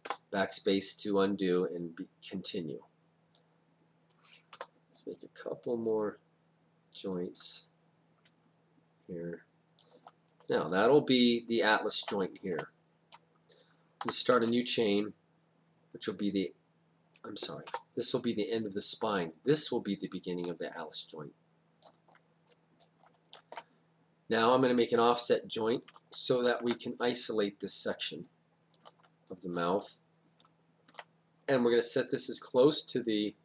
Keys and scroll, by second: 0.0 BackSpace, 4.5 BackSpace, 12.5 Return, 14.0 y, 17.7 BackSpace.